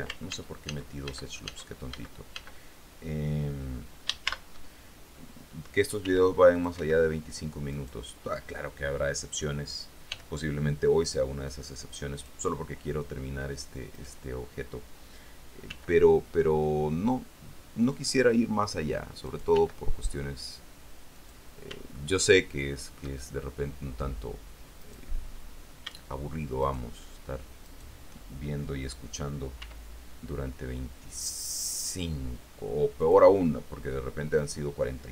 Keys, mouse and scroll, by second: 0.5 ctrl+z, 4.4 ctrl+shift+z, 6.2 ctrl+r, 6.7 ctrl+click, 7.0 ctrl+Escape, 7.9 middle click, 10.3 g, 12.4 click, 14.1 right click, 15.8 g, 18.1 click, 19.4 right click, 19.7 g, 21.3 click, 22.1-23.3 shift+middle drag, 23.5-24.9 shift+scroll up 3, 26.8 shift+right click, 28.1 shift+right click, 29.8 e, 33.2 click, 34.6 middle click.